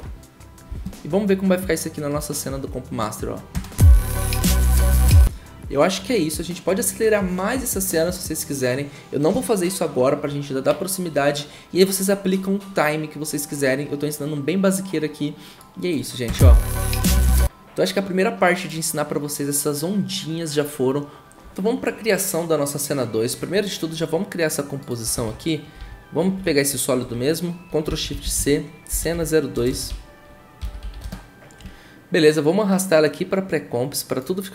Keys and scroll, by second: 3.5 0, 16.2 0, 17.1 0, 25.8 ctrl+shift+c, 27.6-31.4 typing.